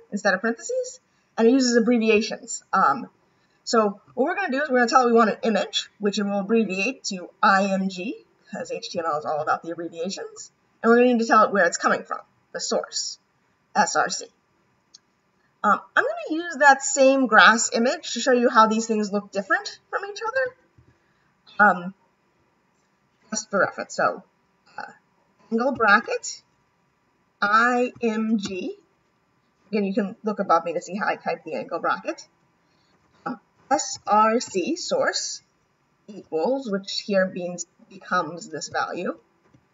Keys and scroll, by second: 25.7 shift+,, 36.1 =.